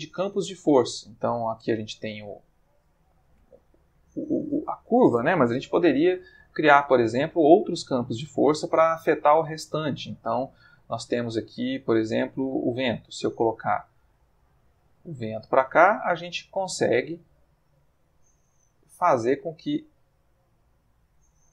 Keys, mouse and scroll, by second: 0.4 click, 1.1-1.7 ctrl+middle drag, 4.7-5.2 middle drag, 5.6 shift+a, 12.3 click, 13.9 r, 15.3 click, 15.5 g, 16.4 click, 17.7 click, 18.5-20.3 drag, 19.9 Escape, 20.8 click.